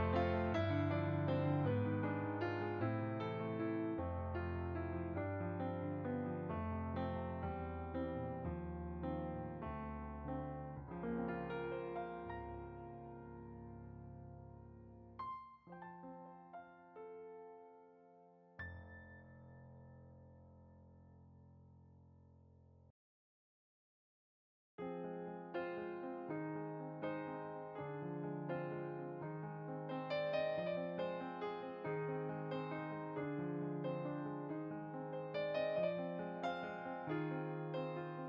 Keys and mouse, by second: 1.5 ctrl+z, 2.1 click, 2.9 middle click, 4.2 shift+click, 6.7 click, 10.4 click, 10.8 click, 18.1 click, 20.9 shift+click, 22.2 middle click, 24.0 click, 24.3 middle click, 24.8-25.8 typing, 25.6 click, 26.9 click, 27.0 middle click, 27.3 click, 29.5 middle click, 30.1 click, 31.5 middle click, 32.3 click, 33.4 middle click, 34.6 ctrl+z.